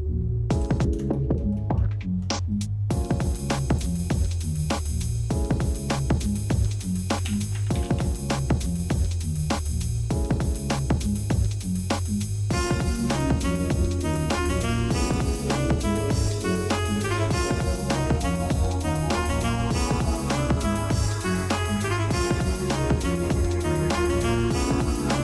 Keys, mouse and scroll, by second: 1.1 shift+middle click, 1.6 shift+middle click, 3.7 click, 5.0-9.9 drag, 11.8 click, 14.0 click, 15.0 click, 17.6 middle click, 18.0 Tab, 18.1 click, 20.2 click, 22.3 click, 22.9 shift+middle click, 24.5 click.